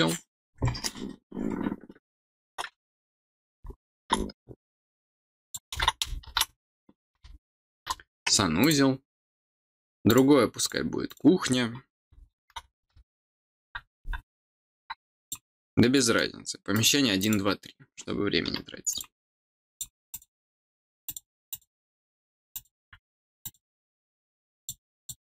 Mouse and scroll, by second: 5.2 click, 8.6 click, 10.0 click, 10.6 click, 11.0 click, 15.2 click, 15.9 middle click, 16.7 click, 17.2 click, 18.9 click, 19.6 click, 20.1 click, 21.0 click, 21.4 click, 22.5 click, 23.4 click, 24.5 click, 24.9 click.